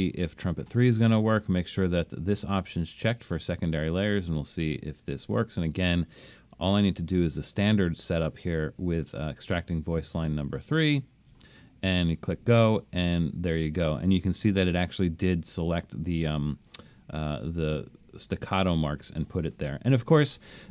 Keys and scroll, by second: 6.7 3.